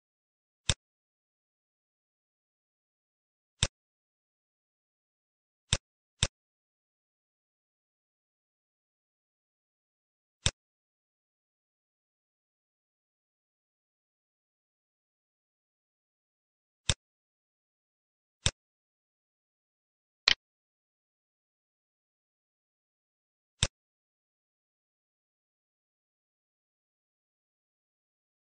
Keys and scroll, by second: 1.3 c, 2.7 e, 8.8 Delete, 10.5 Delete, 21.5 ctrl+r.